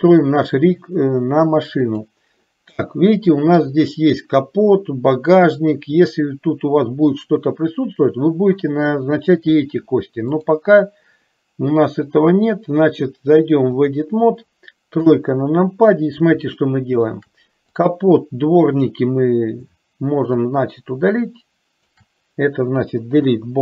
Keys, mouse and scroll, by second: 0.0 click, 2.0 click, 3.0 middle click, 10.5-14.2 drag, 15.1 KP_3, 16.8 shift+middle click, 17.8-19.2 drag, 20.7-22.0 shift+drag, 23.3 Delete.